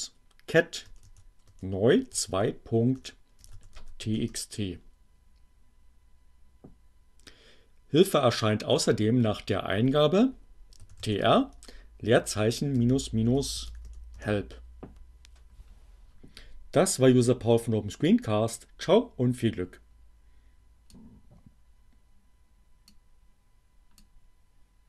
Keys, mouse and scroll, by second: 0.9-4.5 typing, 9.0-9.9 typing, 11.5 space, 11.7 -, 12.9-13.9 typing, 14.2 Return, 17.9-19.6 drag, 23.0-24.1 drag.